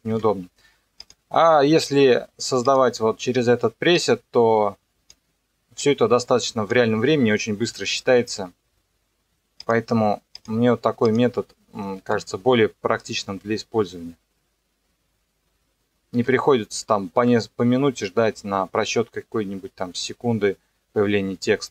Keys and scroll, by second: 0.1 KP_0, 7.1 KP_0, 12.2 KP_0, 16.2 KP_0.